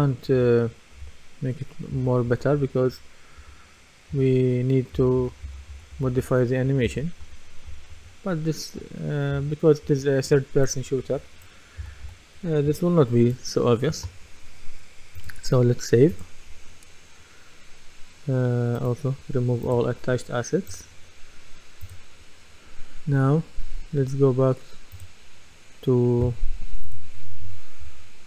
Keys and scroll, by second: 2.6-10.3 typing, 11.8 typing.